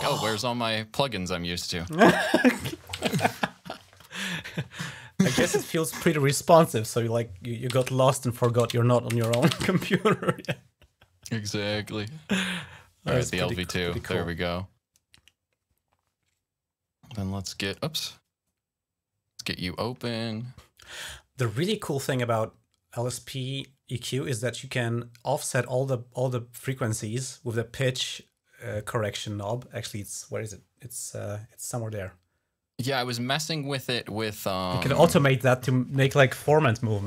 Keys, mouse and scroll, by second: 0.5 click, 2.5-3.5 typing, 4.5-5.5 scroll down 4, 6.1 scroll down 2, 7.5-9.8 typing, 12.2 click, 13.4 click, 13.8 click, 15.4 click, 17.5 click, 18.7 click, 18.9 click, 22.3-23.4 drag, 24.6 click, 26.5 click, 27.7-30.7 drag, 31.7 click, 31.9 click, 32.8 click, 34.0-35.2 drag, 35.8 click, 36.8 click.